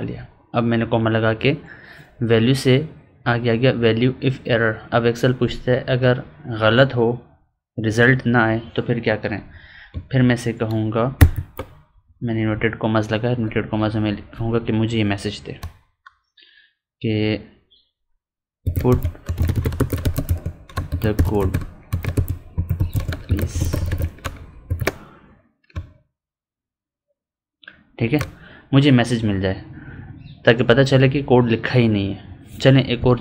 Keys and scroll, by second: 20.2 space, 21.3 space, 22.8 space.